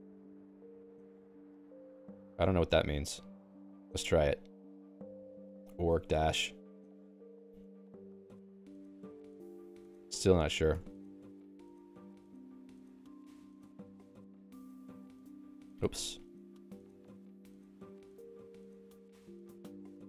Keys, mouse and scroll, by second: 0.9 ctrl+g, 2.3 x, 2.5 x, 2.7 x, 3.3 ctrl+alt+x, 6.5 -, 7.5 -, 8.3 Down, 8.5-10.1 Down, 10.3 Up, 10.5 Up, 10.7 Up, 10.9 ctrl+g, 11.9 x, 12.3 ctrl+s, 15.0 x, 16.8 ctrl+g, 17.9 ctrl+s.